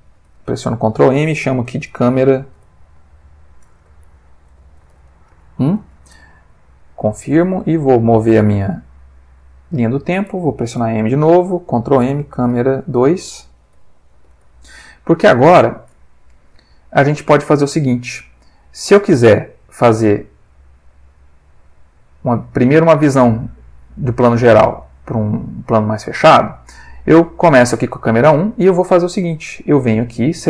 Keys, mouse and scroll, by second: 0.4 ctrl+m, 1.7-5.3 typing, 5.7 shift+Return, 7.4 click, 8.1-10.0 drag, 10.7 m, 12.1-14.1 typing, 14.3 Return, 15.9 Return, 17.3-22.5 drag, 23.7 click, 24.8 click, 26.8 click, 29.9 click.